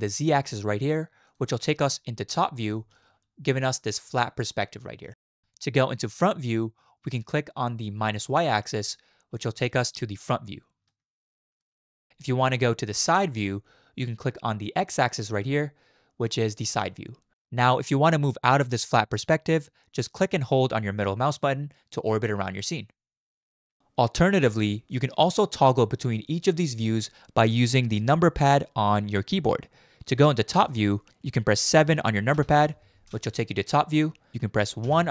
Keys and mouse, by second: 1.2 middle click, 2.8 shift+middle click, 8.7 click, 10.9-11.6 shift+drag, 15.3 click, 20.5-23.8 middle drag, 23.2-23.7 drag, 32.3 KP_7, 34.8 KP_1.